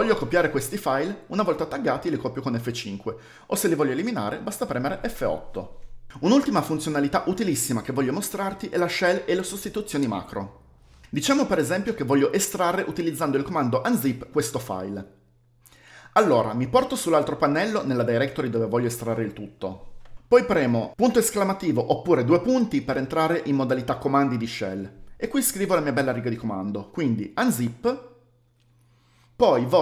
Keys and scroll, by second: 0.1 Up, 0.2 Up, 0.2 Up, 0.3 Up, 0.4 Up, 0.5 Up, 0.6 space, 1.3 Up, 2.8 typing, 3.3 Up, 4.5 F8, 7.4 shift+g, 17.9 typing, 19.3 typing, 22.6 typing, 27.1-28.4 typing.